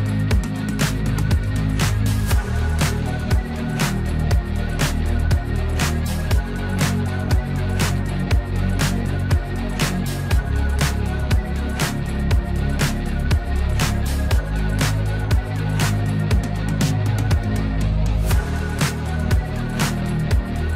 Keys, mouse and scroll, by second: 0.5-5.6 drag, 8.7-18.8 drag, 19.4-20.7 drag.